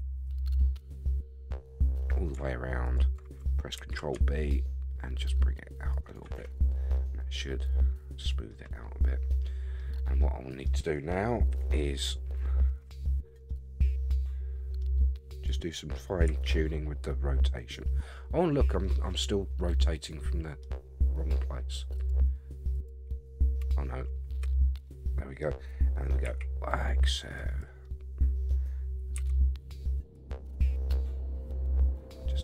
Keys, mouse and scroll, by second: 0.2 alt+shift+click, 0.6-2.1 middle drag, 2.8 alt+shift+click, 3.8 ctrl+b, 6.0 shift+click, 6.0 shift+right click, 6.3 Tab, 6.7 scroll down 3, 6.9-8.5 middle drag, 8.7-9.0 scroll down 2, 9.0-9.8 middle drag, 10.2-10.6 middle drag, 11.5 KP_1, 13.5-14.8 middle drag, 15.3 click, 16.3 r, 18.8-20.6 middle drag, 21.9 click, 23.6 Tab, 24.4 a, 24.7 scroll down 1, 24.8 middle click, 26.2 r, 27.8 middle click, 29.1 g, 30.5-32.4 middle drag.